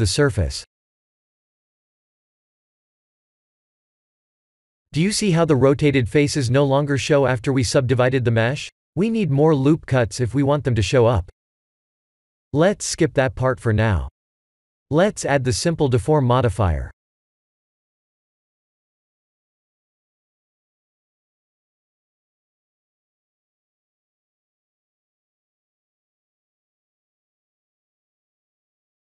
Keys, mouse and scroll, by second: 0.4 ctrl+3, 3.2 right click, 3.2 right click, 5.5 middle click, 11.1 click, 14.4-16.2 scroll down 12, 16.2 click, 16.2-17.0 scroll down 3, 17.0 click, 20.7 click, 21.9 middle click, 26.4 shift+middle click.